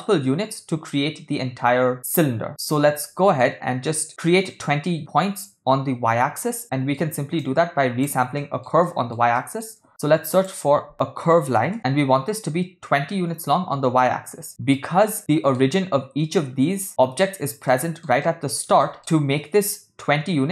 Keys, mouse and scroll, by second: 2.6 middle click, 6.7 middle click, 7.4 click, 8.4 middle click, 8.9 ctrl+middle click, 9.4 middle click, 9.9 shift+a, 15.2-15.6 shift+middle drag, 17.7 ctrl+middle drag, 18.2 middle click, 18.8 shift+scroll up 2, 18.8 shift+middle click.